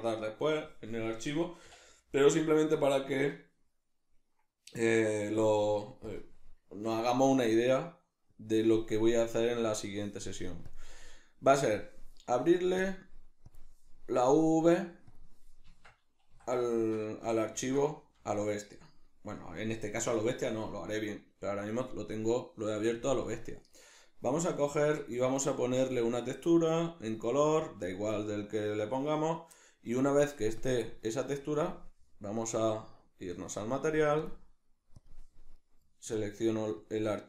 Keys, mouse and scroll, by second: 8.4-16.7 drag, 15.7 Tab, 16.7-23.2 shift+middle drag, 17.2 a, 23.2 drag, 24.7 Tab, 25.9-35.6 drag, 35.6-36.2 middle drag, 36.2 click, 36.8 click.